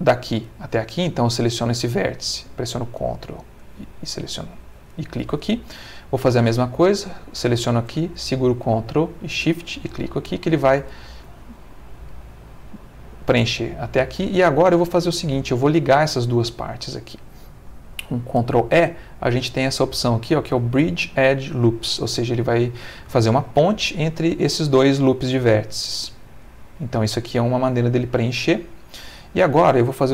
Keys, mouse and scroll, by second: 2.7 ctrl+click, 3.7 ctrl+middle click, 7.2 shift+click, 9.8 ctrl+shift+click, 11.5-13.4 middle drag, 13.9-15.5 middle drag, 17.9 ctrl+e, 25.4 click, 26.4 middle click, 27.0 middle click, 27.7-29.2 middle drag, 29.9 middle click.